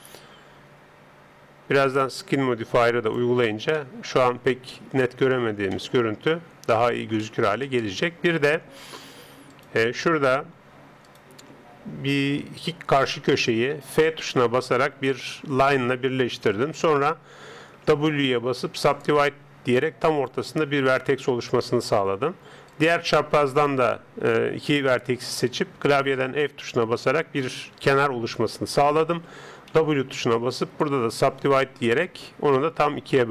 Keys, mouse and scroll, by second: 0.0 click, 3.5-3.8 scroll down 1, 3.8-9.5 middle drag, 9.5-12.8 right drag, 13.9 f, 15.5-17.4 middle drag, 17.9 w, 19.9 right click, 22.7 right click, 26.2 f, 29.7 w.